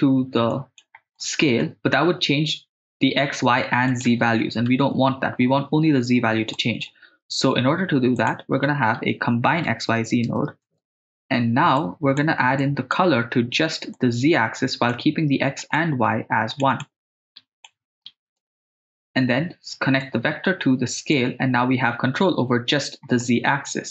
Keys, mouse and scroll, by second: 0.5 click, 1.1 middle click, 3.9 click, 6.5 middle click, 7.2 shift+a, 11.8 click, 12.6 click, 13.9-14.9 drag, 15.6 click, 16.7-18.5 drag, 20.0 click, 20.2-21.2 drag, 23.2-23.9 middle drag.